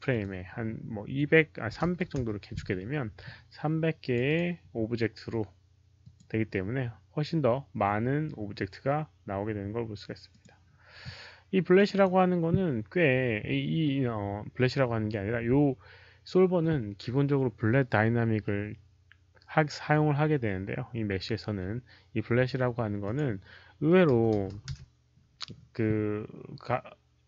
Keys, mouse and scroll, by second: 0.0 click, 1.8 click, 1.8 right click, 1.8-2.4 typing, 2.0 click, 2.0 right click, 2.4 Return, 2.4 click, 3.9 Return, 3.9 click, 3.9 KP_0, 3.9 KP_3, 4.2 click, 5.9 Return, 5.9 click, 5.9 KP_0, 5.9 KP_3, 10.2 click, 11.7 click, 11.8 click, 14.7 click, 22.9 click, 24.1 click, 24.1 KP_5, 27.2 click.